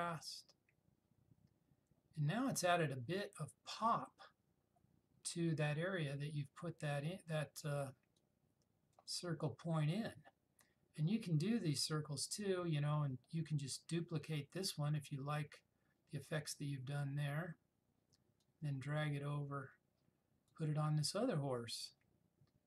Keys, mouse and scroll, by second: 8.2-9.2 drag, 15.2 click, 18.5 click, 18.5-20.7 drag.